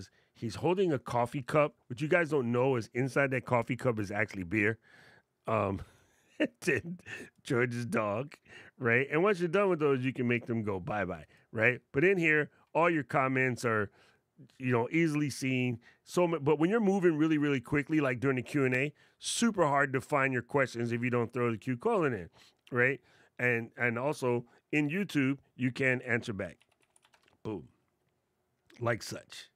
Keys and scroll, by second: 26.1 shift+a.